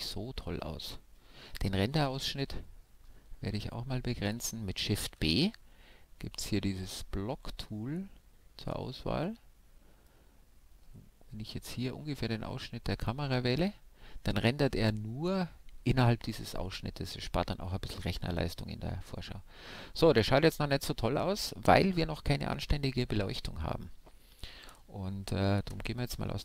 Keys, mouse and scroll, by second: 5.0 shift+b, 25.4 alt+z.